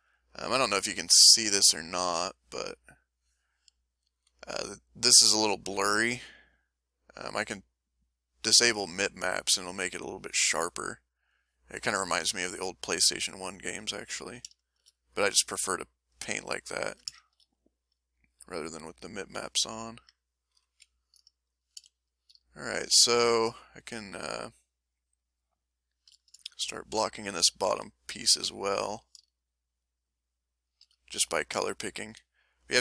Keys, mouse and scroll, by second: 1.3 click, 2.2 click, 3.0-4.4 drag, 7.9 click, 11.2 click, 12.5 ctrl+middle click, 13.1-14.4 ctrl+middle drag, 14.6 ctrl+shift+middle click, 16.7 ctrl+middle click, 17.2-18.5 ctrl+shift+middle drag, 18.6-20.2 ctrl+shift+middle drag, 20.6 ctrl+shift+m, 21.8 a, 22.6 shift+click, 23.1 shift+click, 23.4 shift+click, 24.1 shift+click, 24.5 shift+click, 24.8 shift+click, 25.3 shift+click, 25.6 shift+click, 26.2 shift+middle click, 27.7 s, 28.2 click, 28.9 a, 29.3 shift+middle click, 30.0 shift+click, 30.6 shift+click, 31.6 shift+s, 32.5 click.